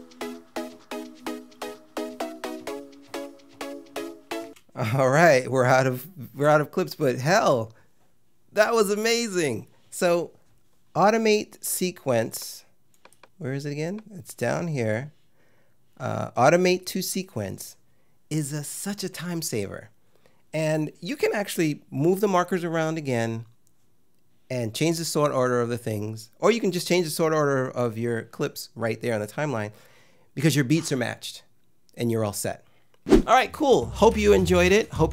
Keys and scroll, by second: 4.4 space.